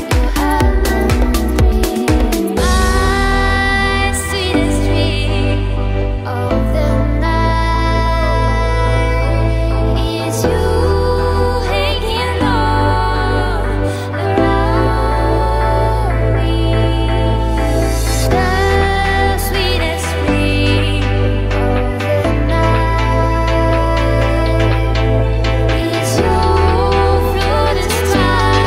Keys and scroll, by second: 11.2-13.6 typing, 15.1 BackSpace, 15.3 BackSpace, 15.7 BackSpace, 15.9 BackSpace, 16.9 Tab, 19.0 super+z, 23.9-27.1 typing.